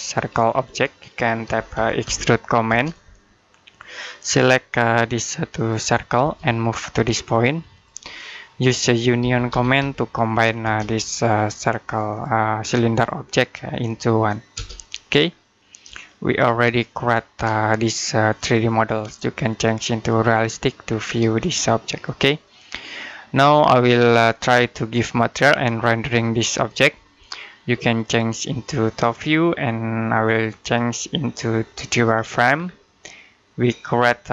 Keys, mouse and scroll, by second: 0.5 middle click, 1.1-2.5 typing, 4.0 click, 6.1 space, 7.6 click, 9.0 typing, 10.5 space, 10.8 click, 14.4 space, 15.1-15.7 scroll down 1, 15.9 middle click, 18.2 click, 20.7-21.1 scroll down 1, 21.2 middle click, 27.9 click, 32.3 scroll down 1, 32.9 middle click, 33.6-34.2 scroll up 1, 34.2-34.3 typing.